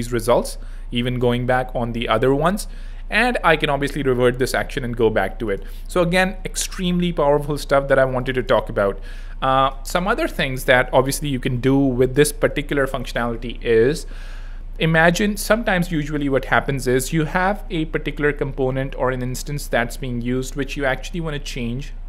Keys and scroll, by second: 8.0 z, 11.8 z.